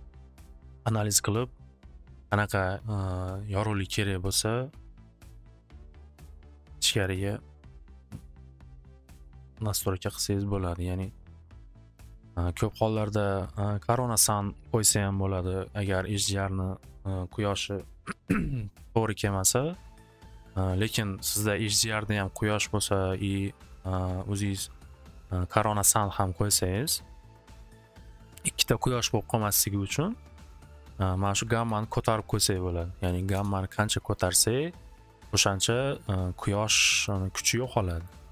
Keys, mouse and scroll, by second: 1.0 click, 1.8 click, 8.0-10.7 drag, 11.9 click, 15.1-16.9 drag, 31.2 click, 31.5 6, 31.7 Return, 32.5 click, 33.0 8, 33.3-36.1 Return, 34.3 click, 37.1 middle click, 38.0 middle click.